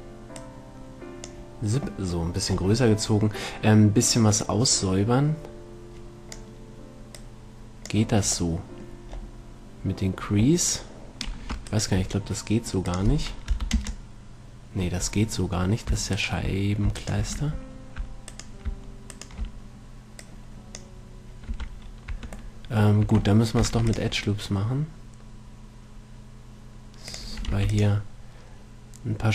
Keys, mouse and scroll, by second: 4.0 middle click, 4.7-6.6 drag, 7.4-9.4 drag, 8.8-11.8 middle drag, 12.0-13.9 right drag, 13.2-14.9 drag, 14.9 middle click, 16.4-21.2 right drag, 17.7 a, 20.5-22.6 drag, 21.8 a, 22.1 right click, 22.4 Tab, 23.3 Tab, 24.0 ctrl+r, 27.5-29.2 drag, 27.8 ctrl+r.